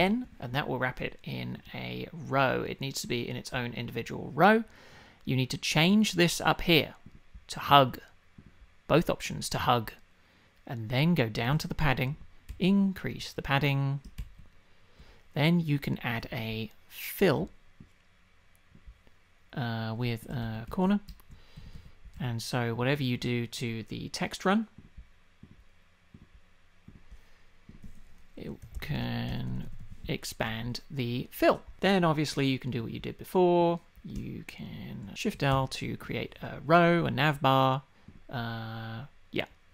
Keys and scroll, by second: 12.5 shift+Up, 20.4 shift+Up, 21.1 shift+Down, 21.6 Up, 22.2 Down.